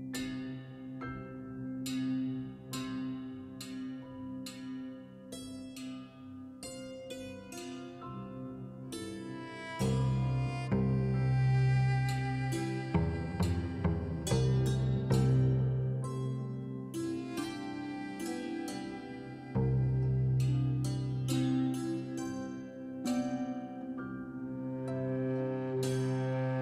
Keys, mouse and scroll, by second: 23.2 click, 24.7 click, 25.5 right drag.